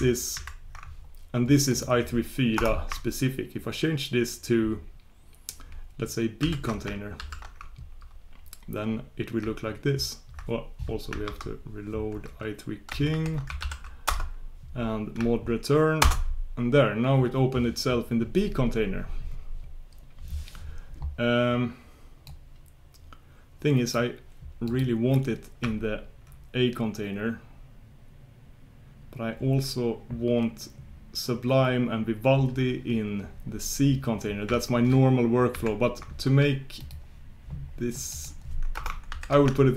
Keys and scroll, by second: 0.5 shift+super+q, 11.2 super+Tab, 16.1 super+Return.